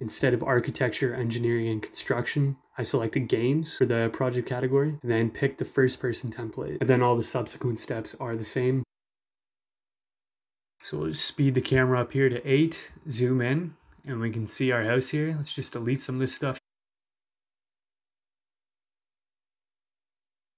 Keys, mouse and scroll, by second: 5.1 click, 5.3 click, 5.9 click, 9.8 click, 10.7 w, 12.4 click, 13.5-16.9 right drag, 14.4 e, 15.4 e, 16.9 d, 18.4 right click, 18.4 d.